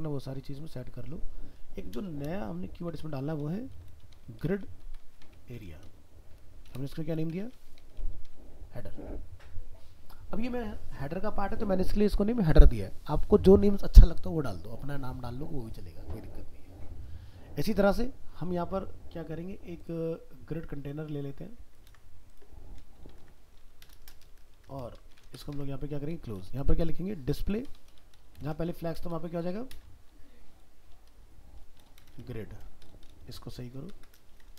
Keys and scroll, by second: 21.9 ctrl+c, 23.2 ctrl+v.